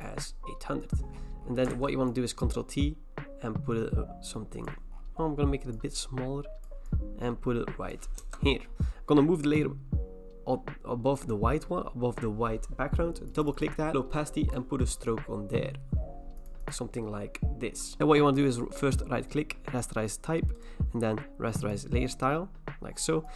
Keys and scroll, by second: 1.7 ctrl+t, 8.2 Return, 18.0 Return, 18.0 ctrl+z, 18.0 typing.